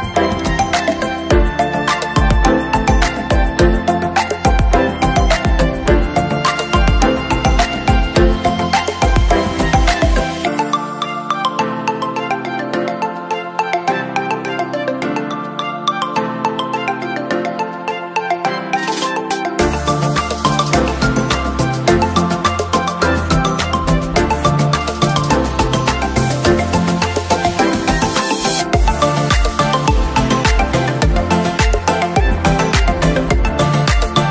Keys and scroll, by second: 6.6 ctrl+c, 7.5 ctrl+v, 8.7 ctrl+c, 9.7 ctrl+c, 9.9 v, 14.5 ctrl+c, 16.5 ctrl+c, 18.1 ctrl+c, 24.6 ctrl+s.